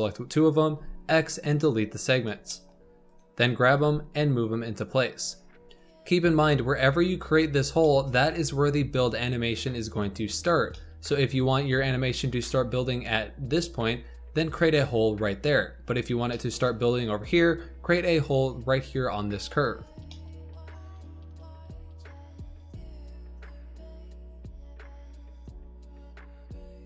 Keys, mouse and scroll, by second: 0.6 x, 2.1 scroll up 2, 2.4 shift+middle click, 3.0 click, 3.7 g, 5.6 shift+middle click, 6.4-7.8 scroll down 2, 7.8-8.6 shift+middle drag, 8.6-10.6 scroll down 3, 10.6-19.3 shift+middle drag, 20.1 shift+middle click, 20.3 scroll up 2, 20.4 click, 20.5 shift+middle click, 20.7 g, 22.1 shift+middle click, 22.3-22.6 scroll up 3, 22.6 click, 22.9 shift+click, 23.1 shift+middle click, 23.8-26.8 typing, 24.4 click, 25.4 scroll up 3, 25.5 shift+middle click.